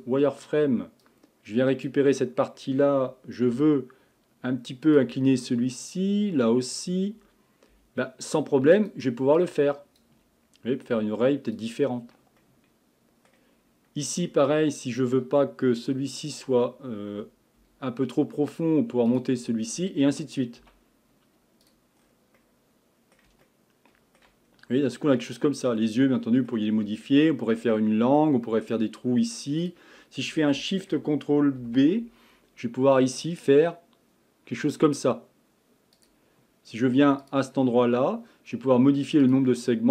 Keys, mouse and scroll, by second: 1.0 click, 3.5 g, 5.3-5.9 scroll up 1, 5.9 click, 7.7 g, 9.4 click, 10.9 g, 12.4-13.6 middle drag, 13.6-14.7 scroll up 4, 14.7-15.4 shift+middle drag, 15.4-16.3 scroll up 2, 16.3 click, 17.6 g, 20.6 z, 22.0-22.4 scroll down 1, 22.4-24.5 middle drag, 24.5-24.8 scroll down 1, 24.8-26.8 middle drag, 26.8-27.7 scroll up 2, 27.7 middle click, 28.5-29.6 scroll up 2, 29.6 click, 31.6 ctrl+shift+b, 37.2-39.9 drag.